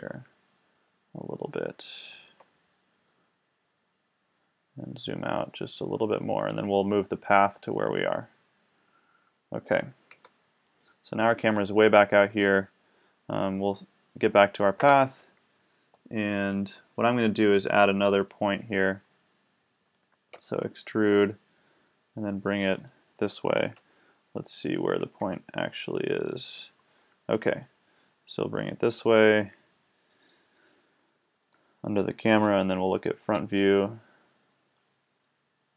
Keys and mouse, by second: 2.1-3.2 middle drag, 10.2 KP_1, 11.2 middle drag, 13.8-14.9 right drag, 14.9 Tab, 20.3 e, 22.9 click, 23.8 KP_7, 32.4 KP_1.